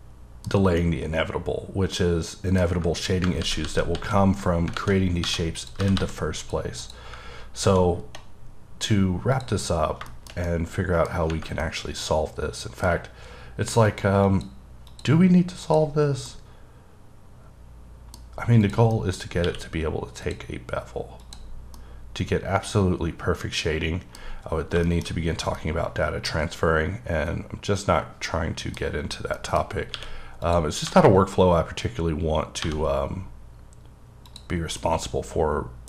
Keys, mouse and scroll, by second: 0.5-0.8 scroll down 2, 0.8 middle click, 2.7-3.4 scroll up 4, 3.4 ctrl+z, 3.9 ctrl+z, 4.8 alt+a, 5.3 1, 5.6 click, 5.8 g, 6.0 g, 6.4 click, 6.8 click, 8.0-8.5 scroll down 2, 8.5-8.9 scroll up 3, 9.4 click, 9.8 scroll down 2, 10.1 shift+middle click, 10.3 scroll down 1, 10.5 middle click, 11.3-11.6 scroll up 1, 11.6 middle click, 13.9 click, 14.3 click, 14.9 click, 15.7 click, 16.0-16.3 scroll down 3, 16.3 middle click, 18.2-18.6 scroll up 3, 18.6 click, 18.9 middle click, 19.3 scroll up 1, 19.4 q, 20.2 click, 21.2 click, 21.5 scroll down 2, 21.7 scroll up 1, 21.8-24.3 middle drag, 24.3-24.8 scroll down 2, 24.8 shift+middle click, 25.2-25.6 scroll up 1, 25.6 middle click, 28.9-29.4 scroll up 2, 29.4 middle click, 29.6-29.9 scroll up 2, 29.9 q, 30.5 click, 30.9 1, 31.4-32.6 scroll up 4, 32.6 1, 34.3 click, 34.5 scroll down 3, 34.8 middle click.